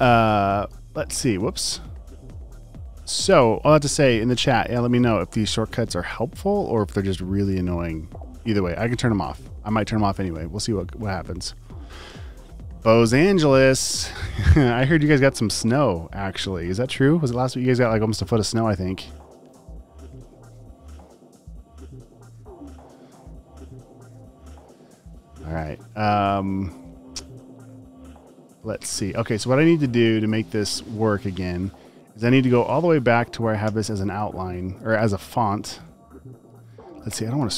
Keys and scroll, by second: 0.8 space, 1.4 super+z, 24.8 space, 25.3 super+space, 29.1 space, 30.9 space, 31.8 space, 33.7 t, 34.6 super+c, 35.4 space, 35.8 space, 36.7 alt+super+space.